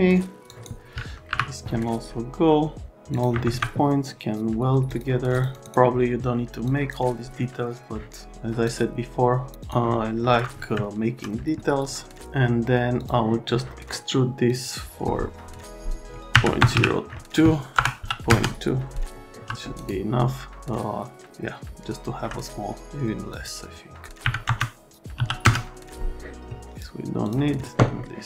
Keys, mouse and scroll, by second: 0.5 click, 1.3 Delete, 3.1 click, 3.4 ctrl+a, 4.9 click, 5.3 click, 5.5 click, 6.6 click, 8.6 click, 9.6 click, 10.8 alt+middle click, 13.0 click, 13.6 middle click, 14.5 click, 14.6 click, 16.3 KP_Decimal, 16.6 KP_0, 17.8 BackSpace, 18.0 KP_2, 18.3 KP_Enter, 19.4 F3, 19.8 right click, 20.6 click, 20.6 alt+middle click, 23.3 click, 24.2 KP_Decimal, 24.5 KP_0, 25.2 KP_2, 25.4 KP_Enter, 26.7 click, 27.2 middle click.